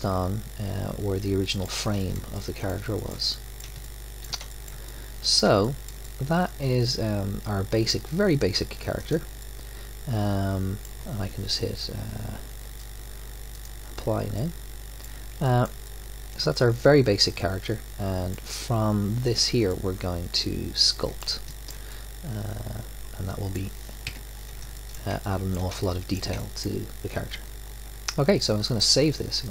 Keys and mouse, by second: 3.6-7.8 middle drag, 9.0-10.2 drag, 10.2-13.5 middle drag, 13.5-15.4 drag, 18.0-19.7 middle drag, 24.0 KP_1, 28.6-29.5 drag.